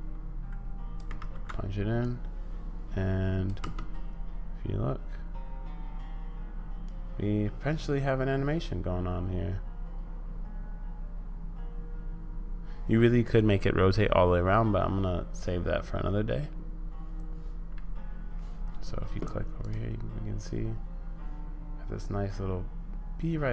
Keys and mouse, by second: 0.4 click, 1.2 ctrl+v, 2.0-3.5 drag, 3.6 space, 19.6-23.5 drag.